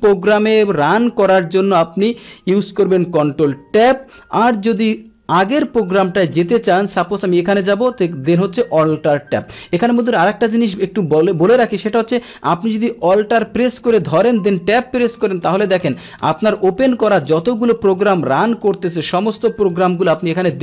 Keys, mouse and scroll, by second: 6.4 click, 7.7 alt+Tab, 8.8 alt+Tab, 9.5 alt+Tab, 13.9 alt+Tab, 15.1 alt+Tab.